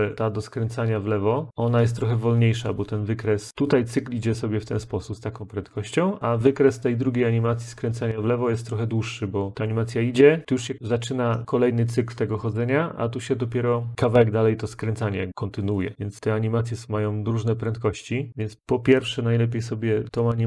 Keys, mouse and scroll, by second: 3.5 click, 9.5 click, 15.9 click, 17.8 click, 19.0 click.